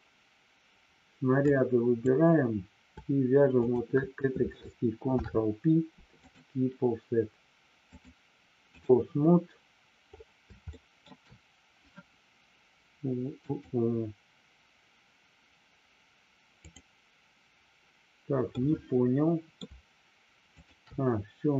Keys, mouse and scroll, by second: 1.5 click, 3.6 shift+click, 5.1 ctrl+p, 7.9-8.9 drag, 10.7 shift+middle click, 13.5 click, 18.5-19.5 middle drag, 20.5 shift+click.